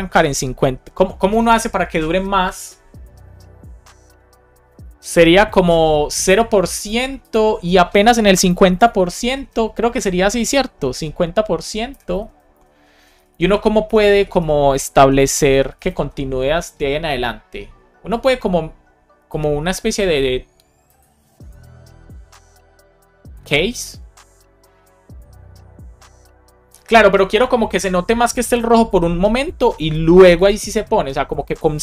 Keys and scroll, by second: 8.2 Return, 9.1 shift+6, 9.8 BackSpace, 10.9 shift+5, 11.8 space, 12.1 shift+[, 12.4 Return, 13.1 Down, 13.7 BackSpace, 15.7 shift+5.